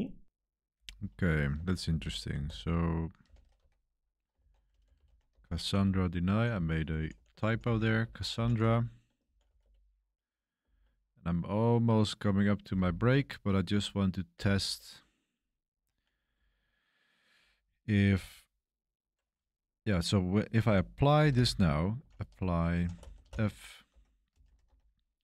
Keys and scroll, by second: 1.5-3.2 typing, 3.5 Tab, 4.3 ctrl+c, 4.4-10.6 typing, 12.3-14.8 typing, 20.3-24.9 typing.